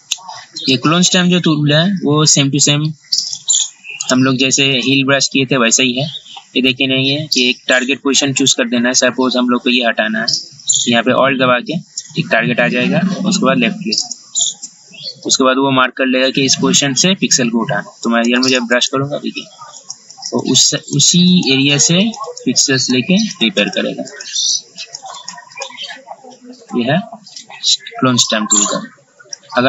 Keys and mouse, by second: 0.8 click, 4.2 right click, 4.9 click, 14.2-29.6 alt+drag.